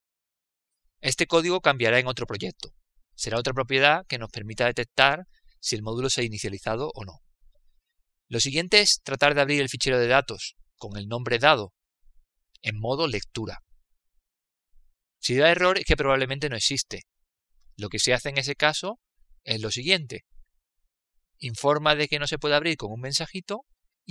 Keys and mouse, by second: 1.8 click, 3.4-4.5 middle drag, 9.1-10.7 middle drag, 10.7-16.2 drag.